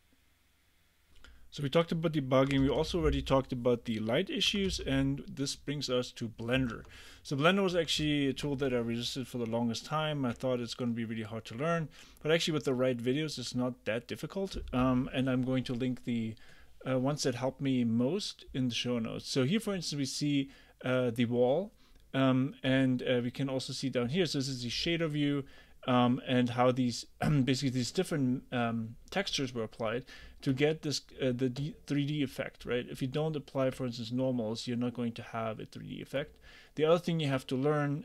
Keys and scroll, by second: 2.3-3.2 typing, 4.3-5.3 typing, 6.8 super+Tab.